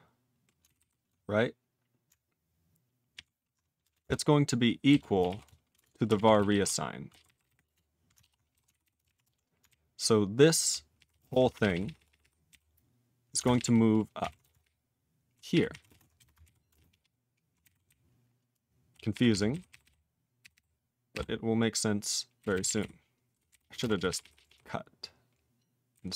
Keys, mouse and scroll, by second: 0.6 alt+b, 0.8 alt+b, 4.6-9.1 typing, 8.3 ctrl+/, 8.7 alt+b, 8.8 alt+b, 9.7-10.7 ctrl+n, 11.0 ctrl+p, 11.1 ctrl+e, 11.2 ctrl+space, 11.3 ctrl+p, 11.5 ctrl+p, 11.6 ctrl+p, 11.7 ctrl+p, 11.9 ctrl+p, 12.0 ctrl+p, 12.1 ctrl+p, 12.2 ctrl+p, 12.5 ctrl+n, 13.5 ctrl+alt+w, 13.6 ctrl+p, 14.2 ctrl+n, 14.4 alt+w, 14.6-15.3 ctrl+p, 15.5 ctrl+p, 15.7 ctrl+e, 15.9 ctrl+space, 15.9 ctrl+a, 16.2 BackSpace, 16.4 ctrl+y, 16.7 ctrl+space, 16.8 ctrl+a, 16.8-17.5 ctrl+p, 17.6 ctrl+g, 17.7 ctrl+e, 17.9-18.9 ctrl+n, 19.1 ctrl+p, 19.3 ctrl+p, 19.5 ctrl+n, 19.7 ctrl+k, 19.8 ctrl+k, 20.4 ctrl+k, 20.5 ctrl+k, 22.4 ctrl+n, 22.5 ctrl+n, 22.7 ctrl+n, 22.8 ctrl+n, 23.3 ctrl+p, 23.5 ctrl+n, 23.6 ctrl+e, 23.7 ctrl+space, 23.8 ctrl+a, 24.0 ctrl+p, 24.1 ctrl+p, 24.2 ctrl+p, 24.3 ctrl+p, 24.5 ctrl+p, 25.9 ctrl+n.